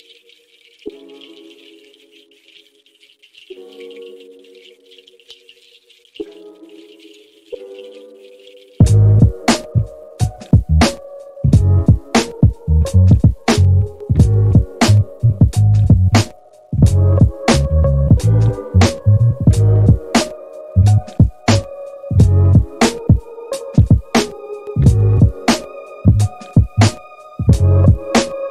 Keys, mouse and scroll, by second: 5.1 g, 8.4-13.3 drag, 13.6 scroll up 1, 13.6-14.2 scroll down 5, 14.2 middle click, 15.9-27.5 drag.